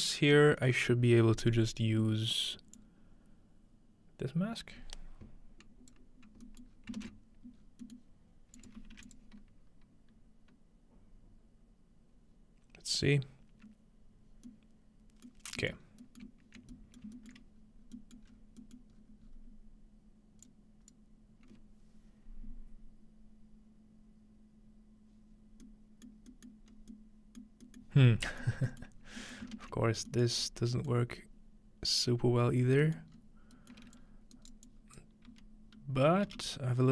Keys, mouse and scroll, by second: 2.7-5.9 drag, 6.7-7.1 scroll down 2, 7.0 ctrl+space, 8.6 click, 8.9 1, 9.1 click, 15.4 middle click, 15.8 middle click, 15.8-17.6 scroll up 1, 16.2-16.7 ctrl+middle drag, 17.0 shift+middle click, 17.4-17.7 shift+middle drag, 17.6-18.0 scroll down 1, 18.3-19.3 scroll up 4, 19.3-20.5 middle drag, 19.8-20.5 scroll up 1, 20.5-22.8 drag, 26.1 middle click, 26.7 middle click, 26.7 scroll up 2, 27.6-28.1 scroll up 2, 28.1-30.4 scroll down 4, 29.1 middle click, 29.4-30.8 ctrl+middle drag, 30.4 scroll up 2, 30.9-32.4 middle drag, 31.2-32.3 scroll up 2, 32.3-32.8 scroll down 3, 33.1 scroll up 2, 34.0-35.3 drag, 34.3-34.7 right drag, 34.5-35.0 scroll up 1, 35.3 f, 36.3 g.